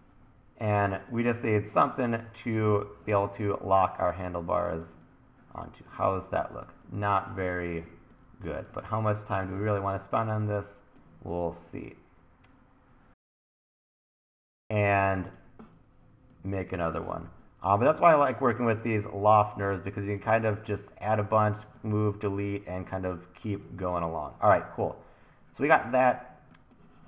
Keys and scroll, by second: 7.9 t, 8.8 super+z, 9.6 t, 13.1 e, 17.1 e, 20.2 t, 23.6 1.